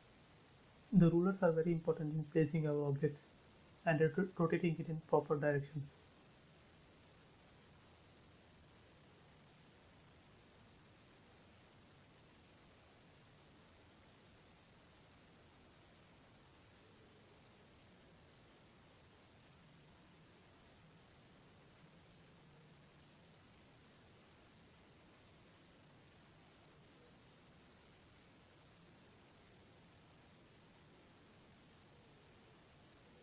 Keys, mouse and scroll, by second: 1.4 click, 3.5 6, 4.2 click, 5.2-5.8 scroll up 1, 6.0 click, 6.1 space, 6.3-6.8 scroll down 1, 6.8-8.8 middle drag, 8.8 click, 10.4-11.3 scroll up 1, 11.3 7, 11.9 click, 12.0 click, 12.4-13.8 scroll up 1, 14.2 click, 14.4 scroll up 1, 14.5 scroll down 1, 15.0 shift+middle click, 15.0 shift+middle click, 15.6 scroll down 1, 16.9 click, 19.4 8, 20.4 click, 20.4 click, 20.9-22.1 scroll up 1, 22.1 click, 22.2 space, 22.4 scroll down 1, 23.0 shift+middle click, 24.1 click, 26.3 9, 26.9 click, 27.3-28.9 scroll up 1, 29.0 space, 29.2 scroll down 1, 29.8 shift+middle click, 30.9 click.